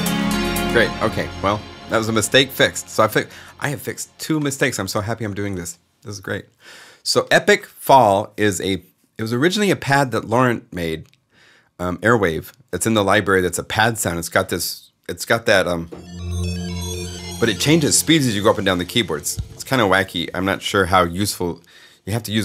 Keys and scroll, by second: 0.4 space.